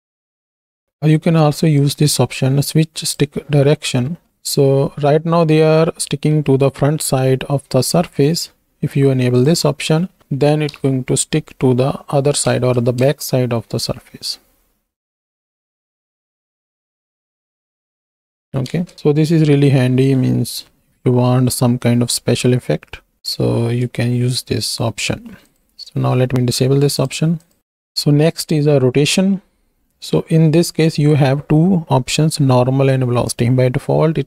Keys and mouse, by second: 0.5 ctrl+space, 1.8-3.1 drag, 4.0 shift+middle click, 6.3 z, 7.8 z, 9.3 click, 10.6 shift+Right, 10.7 shift+Left, 12.5 ctrl+space, 13.0 space, 18.2 space, 18.7 ctrl+space, 19.1 click, 24.0 shift+drag, 25.4 click, 27.0-27.5 drag, 27.6 click, 27.6 x, 28.2-28.7 drag.